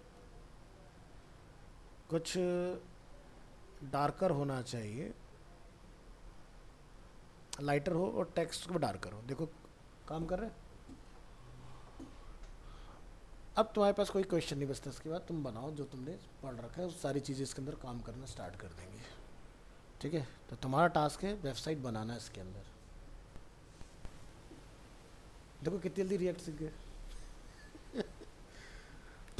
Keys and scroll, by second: 4.5 ctrl+s, 8.0 ctrl+s, 8.4 alt+Tab.